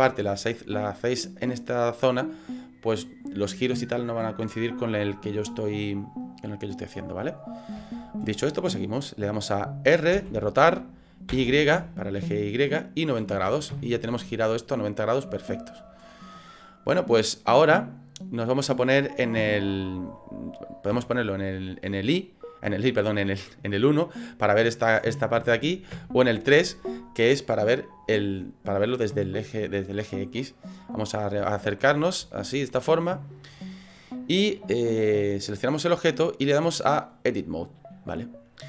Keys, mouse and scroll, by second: 0.1 middle click, 5.2 middle click, 7.1 middle click, 7.4 scroll up 4, 10.1 r, 14.5 scroll down 3, 15.3 shift+middle click, 17.2 click, 17.7 middle click, 19.4 KP_3, 21.0 KP_1, 23.5 middle click, 25.4 KP_1, 26.1 KP_3, 30.3-31.2 scroll up 12, 31.4 shift+middle click, 32.0 scroll up 2, 32.3 shift+middle click, 33.5 right click, 35.0 click, 35.8 right click, 36.7 click.